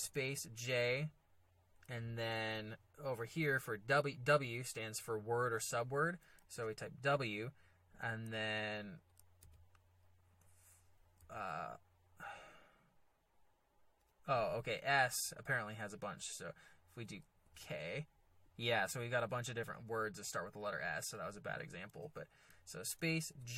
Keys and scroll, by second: 0.0 space, 0.3 j, 6.5 w, 9.4 s, 11.2 w, 17.4 k, 22.8 space, 23.4 j.